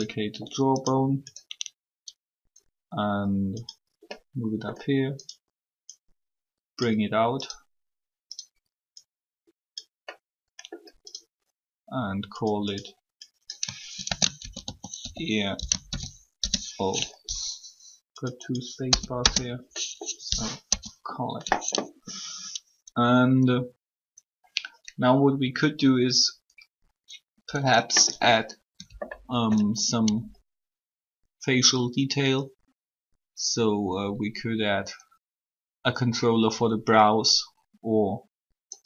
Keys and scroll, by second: 13.9-16.0 typing, 16.3 Return, 18.8 BackSpace, 18.9 Return, 20.6 3.